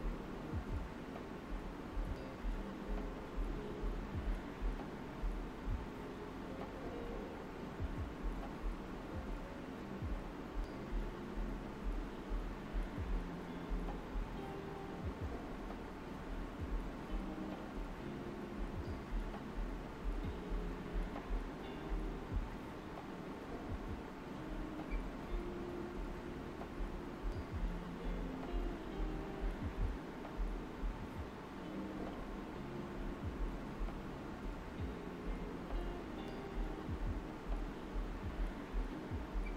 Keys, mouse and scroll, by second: 0.1 alt+right click, 1.8 space, 2.0 click, 2.4 alt+right click, 3.0 alt+right click, 3.7-12.0 drag, 12.0 right click, 12.4 typing, 13.6-17.7 alt+right drag, 17.7-28.4 drag, 25.0 typing, 28.8 d, 31.4 space, 31.6 click, 31.8 space, 32.6 click, 33.0 space, 33.4 click, 33.9 right click, 35.0 alt+right click, 35.6 alt+right click, 37.4 alt+right click, 38.7 space, 39.2 alt+right click.